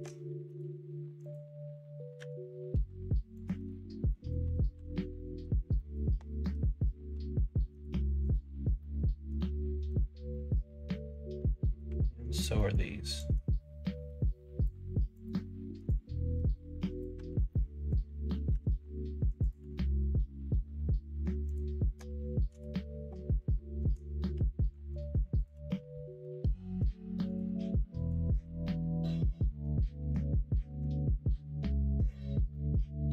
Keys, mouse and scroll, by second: 1.2 click, 2.1 k, 4.0 middle click, 4.8 alt+z, 5.1 shift+middle click, 5.7 middle click, 6.4 k, 8.2 click, 8.7-9.7 middle drag, 10.2 middle click, 11.6 middle click, 11.8 1, 12.2 click, 12.5 middle click, 13.1-14.6 drag, 15.1 click, 15.8-17.1 drag, 17.2 alt+z, 17.4 middle click, 18.4 k, 22.6-23.7 middle drag, 24.3 2, 24.9 click, 25.6 middle click, 26.8 f, 27.2 click, 28.0 shift+click, 28.4 middle click, 28.8 middle click, 30.7 k, 32.0 click, 32.5 middle click.